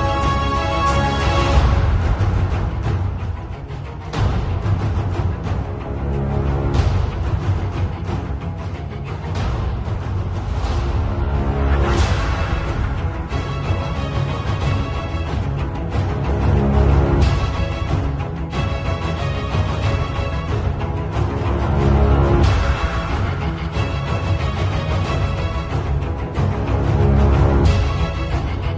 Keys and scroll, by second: 1.0-4.2 typing, 6.1-8.5 typing, 9.6 [, 10.6 [, 11.6 ], 13.3 ], 14.9 ], 15.7 x, 17.3-20.7 typing, 22.1-27.6 typing.